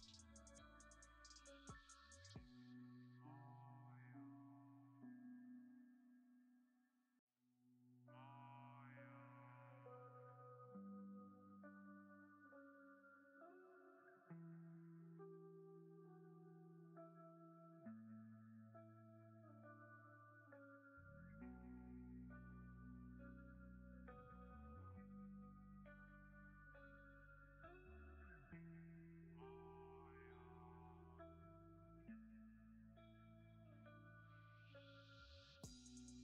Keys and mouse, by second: 5.2 middle click, 5.5 shift+middle click, 6.1 3, 6.4 middle click, 8.2 Tab, 9.6-11.3 drag, 13.3 click, 13.7-15.1 drag, 16.7 Tab, 17.1 b, 17.2 click, 17.8 alt+click, 18.4 ctrl+KP_Add, 18.7 ctrl+KP_Add, 19.2 ctrl+KP_Add, 21.7-23.1 drag, 23.6 click, 24.2 Tab, 24.5 click, 24.5 b, 26.2 click, 29.0 shift+click, 29.1 shift+middle click, 29.2 click, 30.1 click, 35.7-36.2 drag.